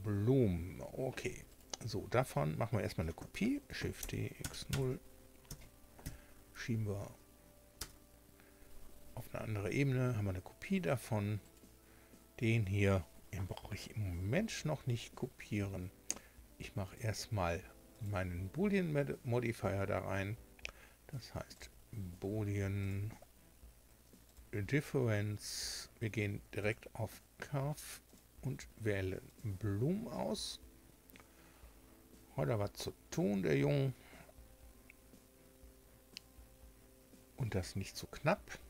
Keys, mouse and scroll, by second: 1.5 right click, 3.6 shift+d, 3.9 x, 4.4 KP_0, 4.7 KP_Enter, 5.4 m, 6.0 0, 7.7 Return, 11.4 right click, 16.8 click, 17.9 click, 21.5 click, 22.8 click, 24.2 click, 25.6 click, 26.6 click, 28.0 click, 29.2 click.